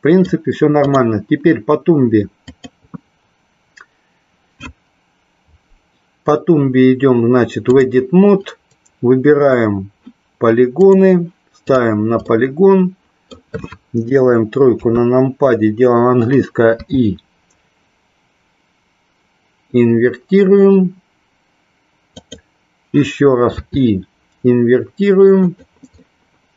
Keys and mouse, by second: 0.8 click, 2.4-7.9 drag, 12.3-13.3 middle drag, 14.8 KP_3, 16.8 i, 22.2 click, 26.0-26.5 middle drag.